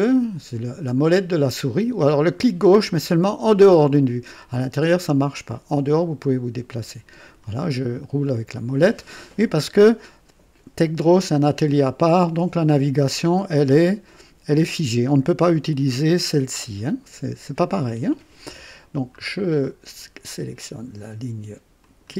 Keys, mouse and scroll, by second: 1.7 middle click, 4.4-5.4 drag, 5.7-7.6 drag, 7.7-8.4 scroll down 2, 19.2-19.5 scroll up 2, 21.8 click.